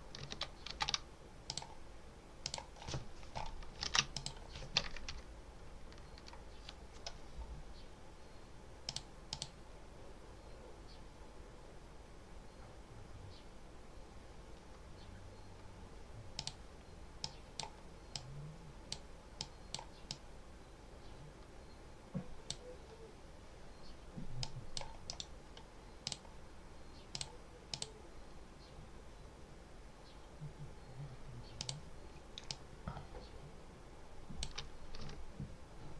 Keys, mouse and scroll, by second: 0.2 ctrl+z, 1.3 click, 2.3 click, 4.0 ctrl+s, 4.0 ctrl+click, 4.9 Down, 6.1 Down, 8.7 click, 9.2 click, 16.3 click, 17.1 click, 18.0 click, 19.3 click, 20.0-22.5 drag, 24.3 click, 25.0 right click, 25.9 click, 27.0 click, 27.6 click, 31.5 click, 32.3-34.5 drag.